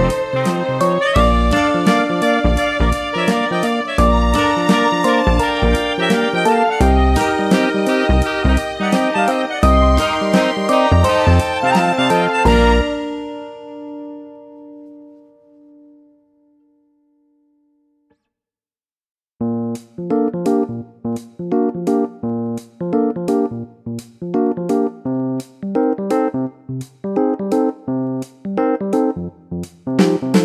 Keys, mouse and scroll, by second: 0.9 click, 2.5 click, 5.6 click, 8.4 click, 11.6 click, 13.5 click, 14.2-15.5 typing, 16.6 Return, 18.1 click, 20.9 click, 24.3 click, 27.4 click.